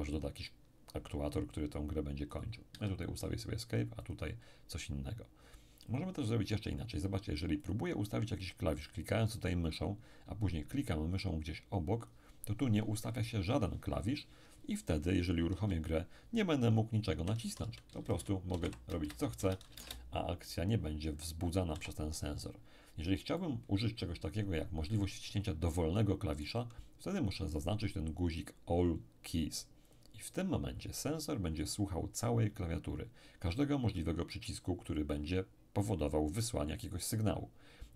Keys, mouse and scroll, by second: 2.3 click, 2.7 Escape, 4.0 click, 5.9 click, 7.6 click, 11.9 click, 15.5 p, 17.1-19.8 typing, 21.7 Escape, 23.3-27.4 middle drag, 29.9 click.